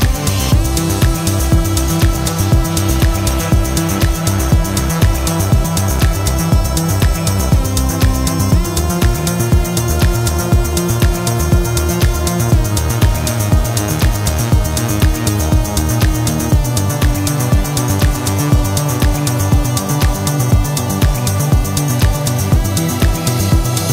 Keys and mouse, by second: 4.0-16.0 drag.